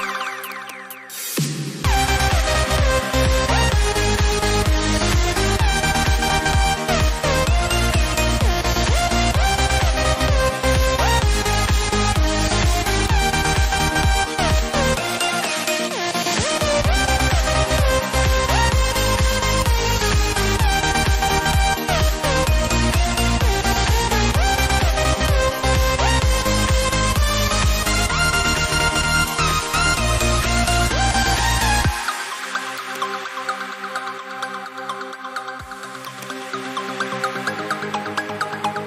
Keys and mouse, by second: 12.0 click, 26.4 click, 31.2 click.